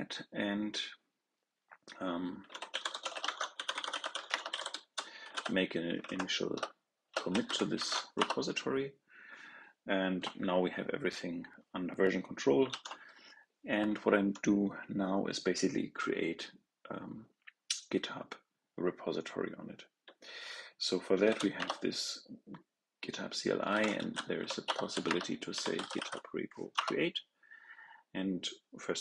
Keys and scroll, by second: 12.6 ctrl+l.